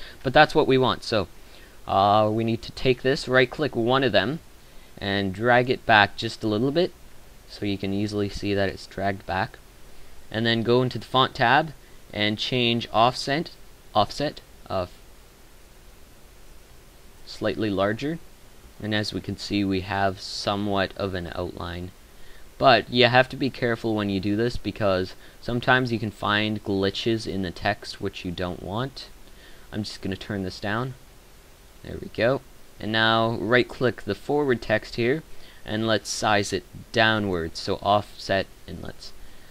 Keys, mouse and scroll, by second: 7.1-7.7 middle drag, 16.7-17.4 middle drag, 19.8-20.4 middle drag.